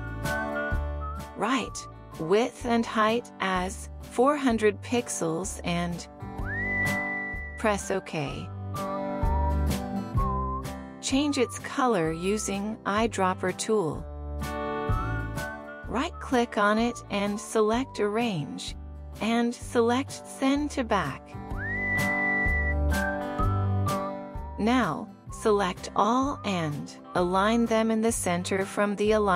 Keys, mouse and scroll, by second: 1.6-6.0 typing, 3.0 Tab, 5.3 Tab, 16.6 right click.